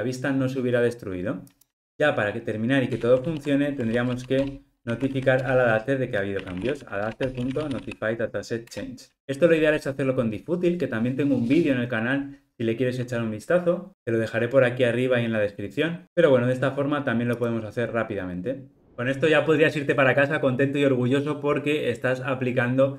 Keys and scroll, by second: 7.1 Return, 17.4 ctrl+r.